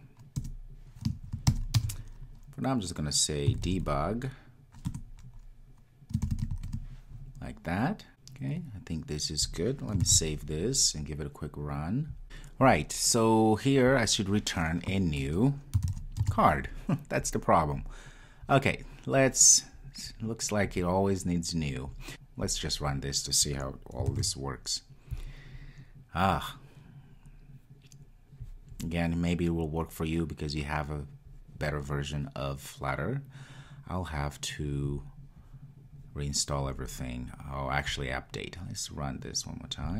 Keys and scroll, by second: 5.1 Return, 10.2 super+s, 24.4 super+s, 25.2 ctrl+r, 38.3 super+F2, 38.5 super+F2.